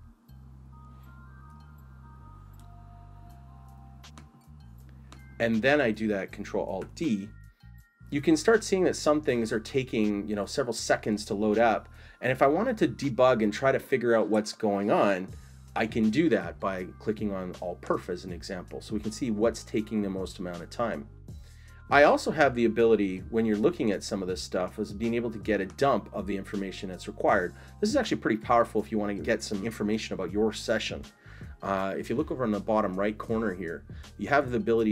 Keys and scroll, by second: 6.9 ctrl+alt+d.